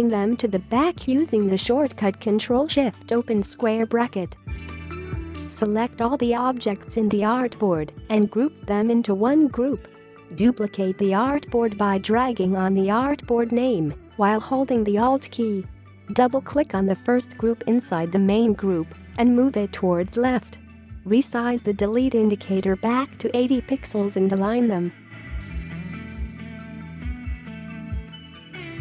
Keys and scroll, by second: 8.3 ctrl+g, 20.1 space, 24.1-25.2 typing, 28.4 space, 28.6 space.